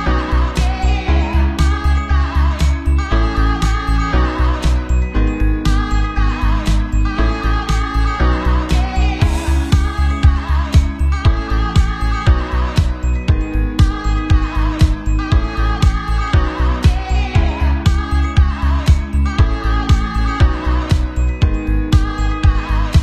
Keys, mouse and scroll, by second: 0.6 middle click, 0.8 r, 1.1 click, 1.6 middle click, 1.9 r, 2.3 click, 2.6-3.6 shift+middle drag, 3.6 click, 3.8-5.4 shift+middle drag, 3.9 r, 4.7 r, 5.4 click, 5.5-6.2 middle drag, 5.9-7.8 typing, 6.2 click, 6.6-6.9 middle drag, 6.9 click, 7.4 shift+middle click, 7.6 click, 8.4-10.6 shift+middle drag, 8.9 Tab, 9.1 KP_1, 9.3 shift+z, 9.4 ctrl+a, 9.5 o, 9.6 ctrl+a, 10.4 ctrl+a, 10.6 Tab, 10.6 click, 10.8-13.1 shift+middle drag, 11.6 Tab, 11.6-13.3 typing, 12.2 Tab, 13.1 click, 13.3 Tab, 13.4 alt+shift+middle click, 14.8 shift+middle click, 15.4 alt+shift+middle click, 15.5 x, 15.7 Tab, 16.8 shift+d, 17.3 ctrl+shift+a, 18.1 r, 18.4 s, 18.6 click, 19.1-21.6 middle drag, 19.7 shift+z, 19.9 shift+z, 19.9 b, 20.5 ctrl+j, 21.0 shift+s, 21.2 shift+a, 21.6-23.0 drag.